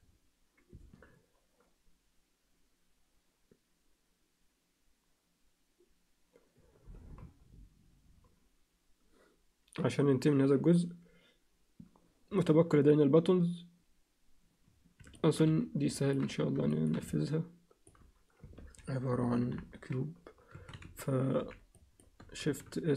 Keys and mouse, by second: 15.2 alt+shift+middle click, 15.5 z, 16.0 ctrl+alt+middle click, 16.7 alt+shift+middle click, 17.0 alt+middle click, 18.5 ctrl+KP_3, 19.5 ctrl+KP_1, 20.5 a, 21.4 b, 22.4 shift+s.